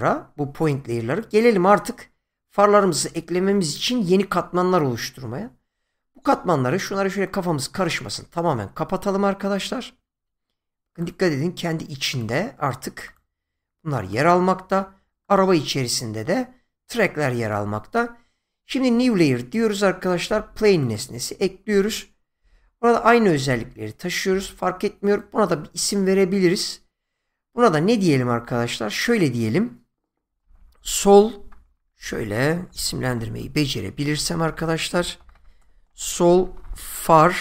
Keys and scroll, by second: 30.4-31.5 typing, 32.7-36.6 typing.